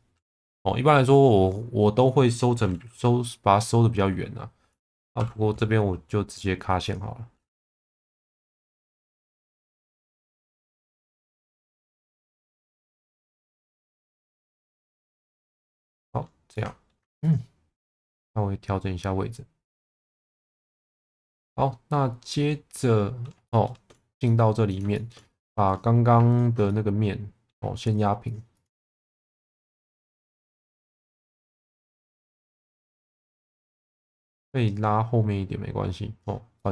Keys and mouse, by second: 5.2 j, 8.7 shift+click, 9.6 j, 10.8 click, 12.8 j, 13.3 click, 14.1 shift+click, 15.4 j, 16.0 middle click, 16.5 alt+middle click, 17.2 click, 18.0 click, 20.8-23.2 middle drag, 23.5 shift+middle click, 24.2 middle click, 24.9 shift+middle click, 25.4 3, 25.7 click, 26.7 middle click, 28.3 ctrl+click, 29.2 middle click, 30.8 s, 31.2 y, 31.5 KP_0, 31.7 KP_Enter, 32.3 alt+middle click, 33.0 middle click, 33.9 shift+middle click, 34.8 click, 36.6 middle click.